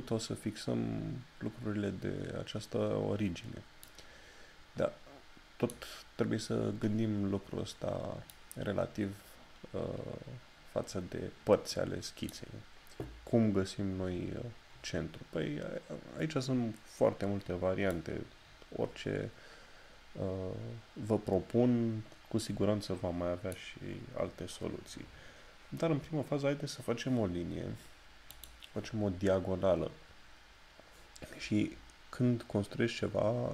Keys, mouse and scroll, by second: 3.9 click, 6.2 scroll down 1, 17.9 click, 28.3 click.